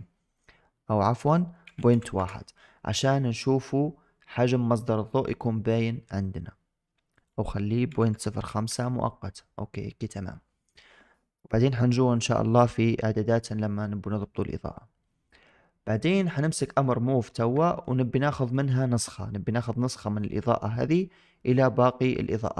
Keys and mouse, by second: 1.0-2.1 drag, 7.0-8.6 drag, 16.0 click, 16.8-17.2 shift+middle drag, 17.6 shift+middle click, 18.4 shift+click.